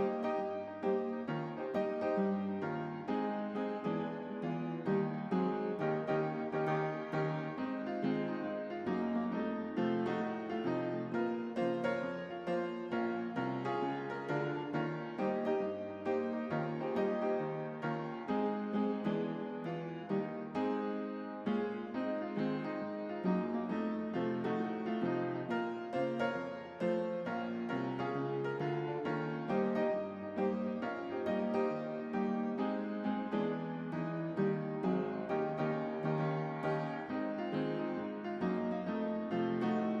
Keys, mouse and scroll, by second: 1.7-2.4 typing, 4.0 typing, 6.9 right click, 6.9 right click, 6.9 typing, 8.4 click, 9.3-11.9 typing, 12.8 click, 14.6 click, 19.0 click, 22.6-23.9 drag, 28.0 click, 29.9-31.3 typing, 31.9-34.3 drag, 36.0-37.3 typing, 38.5-40.0 drag.